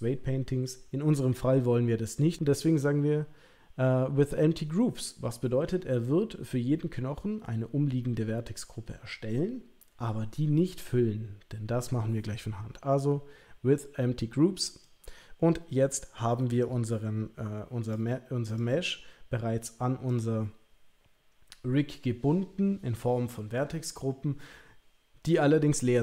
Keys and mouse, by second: 16.6 click, 18.5 click, 20.1 click.